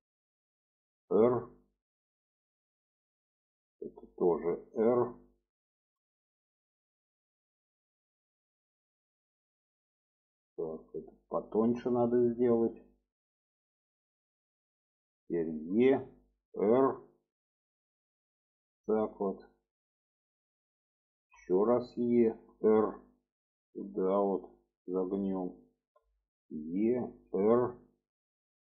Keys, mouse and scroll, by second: 1.2 r, 3.1 click, 5.9 click, 7.1 click, 8.3 click, 9.4 click, 10.6 click, 12.0 click, 13.1 click, 14.4 click, 15.7 e, 16.7 r, 18.4-20.4 drag, 21.3 e, 22.5 r, 23.7-25.2 drag, 25.9 e, 27.3 r.